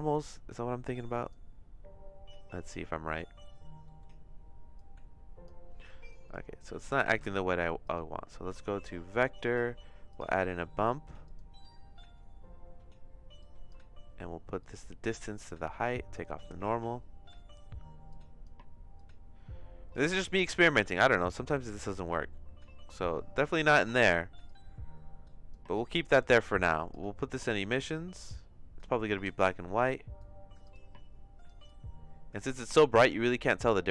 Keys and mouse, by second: 0.5 click, 4.0 middle click, 4.7 click, 6.2 click, 6.6 click, 7.0 shift+a, 13.4 click, 14.6 click, 15.8-17.4 drag, 18.1 click, 18.9 click, 20.9 click, 22.2 click, 24.4-25.6 drag, 26.3 click, 30.1-31.5 drag, 31.6-33.9 drag.